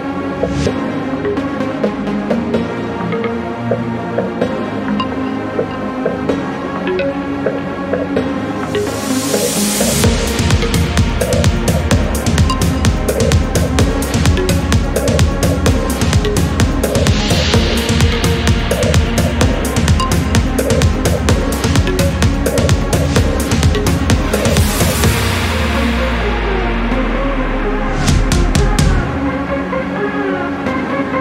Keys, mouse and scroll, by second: 0.0 click, 1.1 6, 1.4 0, 3.1-3.5 scroll down 2, 4.0 click, 5.6 click, 6.4-7.0 scroll up 1, 7.0 scroll down 1, 9.6 click, 11.0 click, 12.4 click, 13.1 click, 13.7 click, 16.2 click, 17.7 click, 19.8 click, 20.3 space, 20.8-22.4 drag, 23.5 click, 25.3 click, 25.8 space, 26.4-28.2 drag, 28.4 0, 29.1 scroll down 2, 29.6 scroll up 2, 30.2 click.